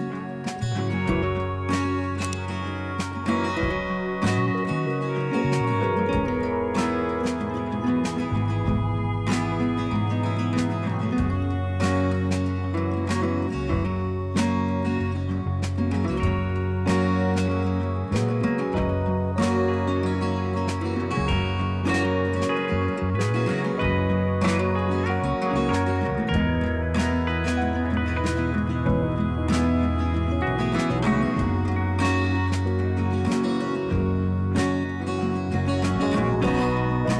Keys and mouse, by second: 3.9 click, 4.0 click, 8.0 click, 9.0 click, 9.8 click, 10.6 click, 11.2 click, 12.2 click, 13.1 click, 14.0 click, 16.1 click, 17.8 click, 20.3 click, 23.9 click, 26.5 click, 28.0 Up, 33.4 click, 36.8 Down.